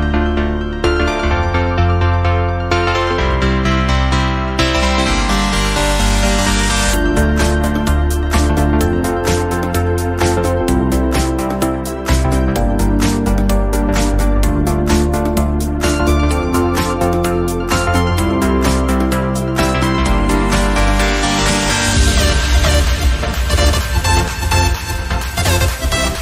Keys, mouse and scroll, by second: 0.0-0.5 middle drag, 0.5-1.1 scroll up 2, 1.1 click, 1.6 KP_1, 2.1 alt+z, 2.3 shift+middle click, 2.6-3.5 scroll up 1, 3.5 click, 5.5 alt+z, 5.6-6.4 middle drag, 6.4 click, 7.1-7.4 scroll down 1, 7.4 KP_1, 8.0-8.7 scroll up 2, 8.7-9.7 middle drag, 9.7 KP_1, 10.2 alt+z, 10.5 shift+middle click, 11.0 click, 11.6 g, 13.5-14.0 scroll down 2, 14.0 alt+z, 14.3-15.6 middle drag, 15.6 click, 16.0 click, 16.9 click, 17.0 scroll down 2, 17.1 middle click, 17.7 KP_1, 18.3 shift+middle click, 18.6-18.9 scroll up 1, 18.9 click, 19.4 Tab, 19.6 scroll up 1, 19.8 shift+middle click, 20.4 alt+z, 20.7 click, 21.5 click, 22.2 shift+middle click, 22.7 Tab, 22.9 click, 23.1 Tab, 23.7 click, 24.3 click, 24.9 Tab, 25.2 click, 25.6 alt+z, 25.7-26.1 scroll down 6, 26.1-26.2 shift+middle drag.